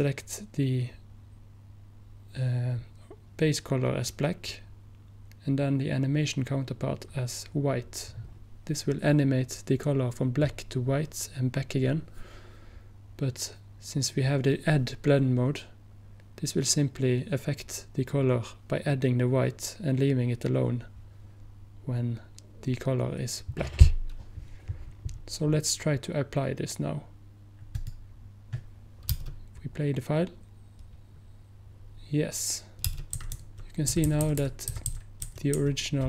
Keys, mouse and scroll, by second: 27.8-29.9 drag, 33.2 Right, 33.2 space, 33.4 Right, 34.0 l.